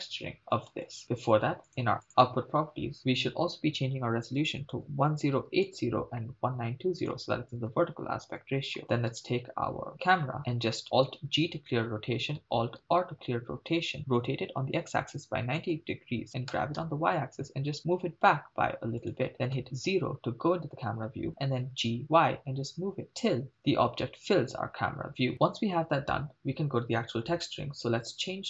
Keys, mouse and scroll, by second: 0.7 shift+space, 1.0 scroll down 2, 1.7 click, 2.0-2.5 drag, 3.0-5.7 drag, 4.8 BackSpace, 7.1-8.4 drag, 9.2 click, 9.2 right click, 11.3 alt+g, 12.8 alt+r, 14.0 r, 14.6 x, 15.1 9, 15.2 0, 15.6 Return, 16.6 g, 16.8 y, 19.1 click, 19.5 KP_0, 21.7 g, 21.9 y, 23.5 click, 23.7-24.0 scroll down 3.